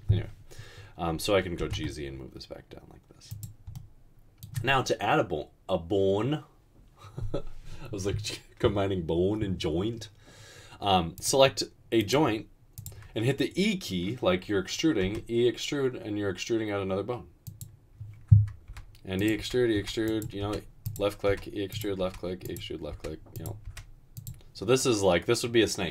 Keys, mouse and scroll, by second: 1.7 typing, 15.3 e, 19.4-23.7 typing.